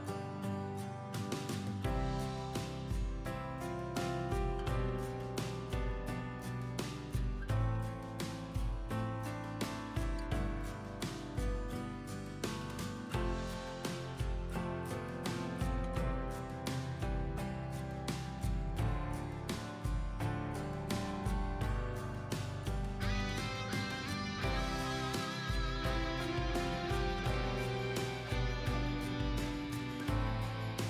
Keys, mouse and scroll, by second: 11.6 b, 16.2-18.5 drag, 19.8 alt+scroll up 1, 20.9 scroll up 1, 21.7 click, 22.7 alt+scroll down 1, 23.6 alt+scroll up 2, 27.1-30.8 drag.